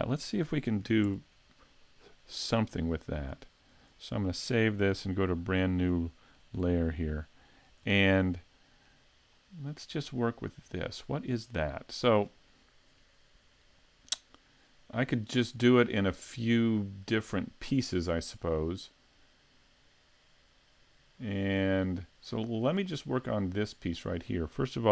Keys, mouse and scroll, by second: 1.1 ctrl+Up, 1.1 scroll down 1, 2.0-2.5 scroll down 1, 2.5 scroll down 2, 3.7 s, 5.5 click, 5.9 shift+middle click, 6.6-6.9 scroll up 4, 6.9 middle click, 7.9 shift+middle click, 9.3-9.9 scroll down 3, 10.0 middle click, 11.7 shift+middle click.